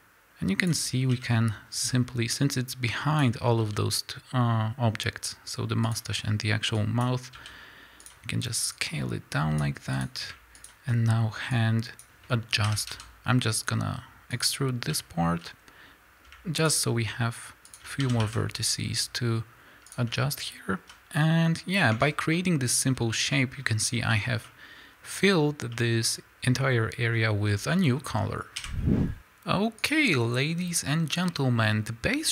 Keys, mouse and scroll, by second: 1.2 KP_1, 3.6 s, 6.8-8.0 drag, 7.3 s, 8.7-10.0 drag, 10.6 shift+click, 11.5-14.4 drag, 12.7 e, 15.4 z, 16.7 shift+click, 18.0 s, 20.9 z, 21.9 Tab, 22.2 scroll down 1, 22.5-28.8 middle drag, 23.0 scroll up 2, 27.4 scroll down 2, 28.6 KP_1, 29.1 a, 31.3-32.3 middle drag.